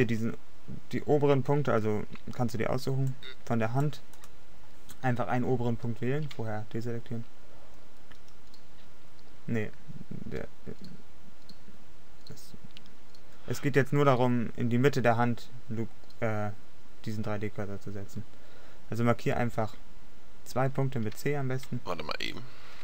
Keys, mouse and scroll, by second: 0.0 a, 0.1 g, 4.8-6.4 drag.